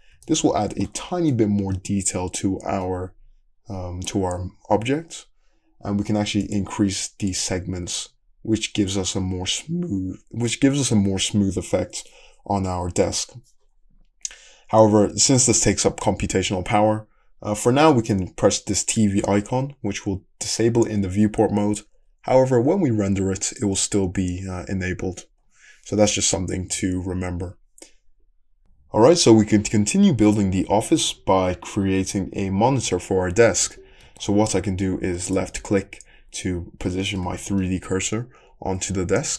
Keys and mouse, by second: 0.2-3.7 shift+middle drag, 23.7-39.3 middle drag.